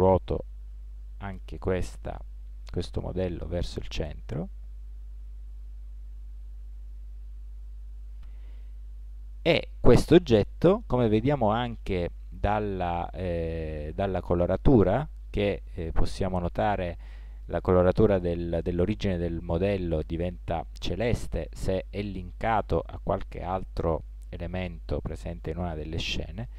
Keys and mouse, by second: 0.8 r, 11.2-12.7 right drag.